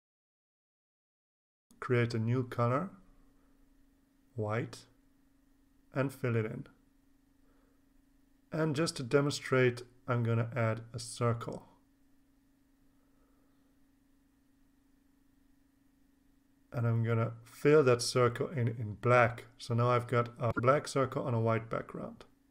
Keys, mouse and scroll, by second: 0.9 click, 2.9 click, 4.1 click, 4.6-5.7 drag, 6.5 click, 8.4 click, 10.3 click, 11.6 click, 12.5 click, 13.5-15.6 drag, 17.5 click, 18.5 click, 22.4 click.